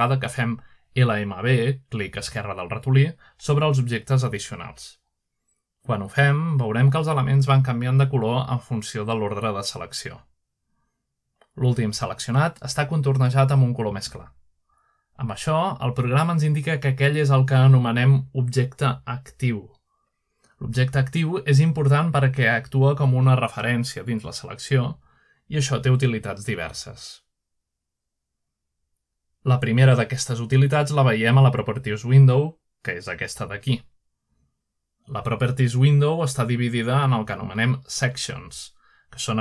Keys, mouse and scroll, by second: 0.0-0.9 drag, 1.1-2.0 shift+drag, 3.4 shift+click, 7.1-7.8 middle drag, 9.0 shift+click, 10.0 shift+click, 11.1 shift+click, 11.5-13.0 shift+drag, 14.9 shift+click, 18.9-19.9 shift+middle drag, 21.8 shift+click, 22.3-24.5 drag, 25.3-26.6 shift+drag, 32.5-33.8 shift+drag, 36.0-37.1 drag.